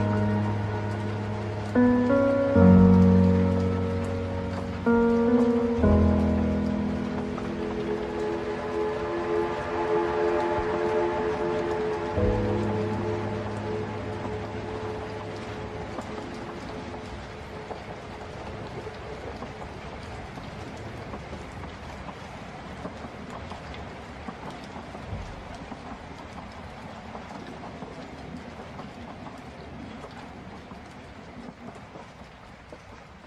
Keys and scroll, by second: 7.7 ctrl+alt+space, 22.4 ctrl+space.